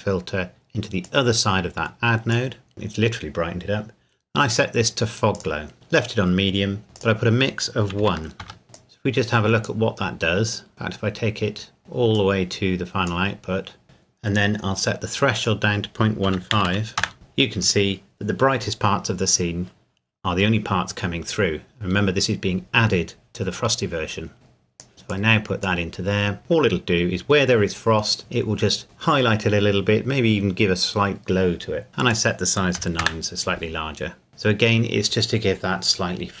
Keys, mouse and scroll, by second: 1.0 click, 4.5 click, 7.0 click, 8.0 KP_1, 8.4 KP_Enter, 8.6 middle click, 8.7 click, 11.8 click, 15.4 click, 16.3 KP_Decimal, 16.5 KP_1, 16.7 KP_5, 17.0 KP_Enter, 24.3 click, 28.2 scroll up 1, 32.1 click, 32.8 KP_9, 33.0 KP_Enter, 34.3 scroll down 1.